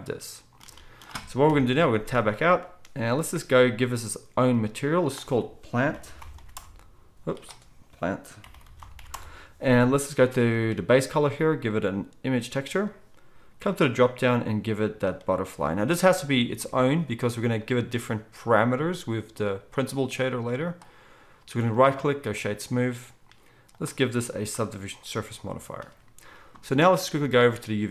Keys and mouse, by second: 1.4 KP_1, 2.0 Tab, 4.5-27.9 drag, 24.3-27.9 middle drag.